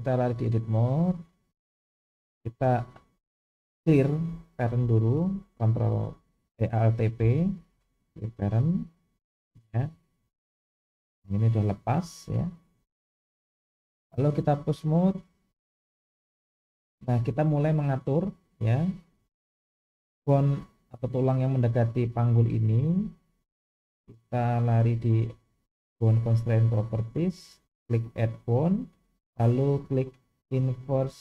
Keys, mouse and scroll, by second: 1.0 click, 7.2 alt+p, 10.6 g, 14.0-15.5 drag, 20.3 click, 24.3 click, 27.1-31.2 drag.